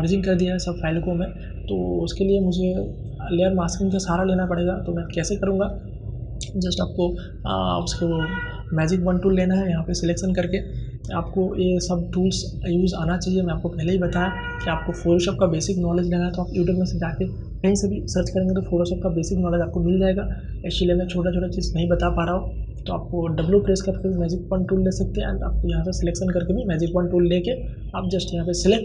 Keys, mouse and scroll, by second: 1.9-4.1 drag, 6.7 right click, 8.2-18.2 drag, 22.9 click.